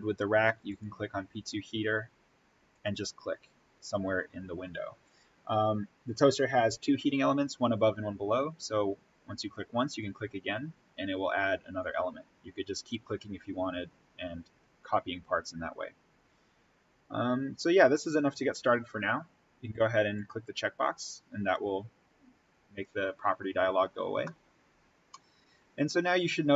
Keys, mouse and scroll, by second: 0.6 click, 9.8 click, 20.1 click, 20.9-21.6 scroll up 1, 23.6-24.1 scroll down 1, 24.2-26.0 middle drag, 26.0-26.5 scroll up 1, 26.5 scroll down 1.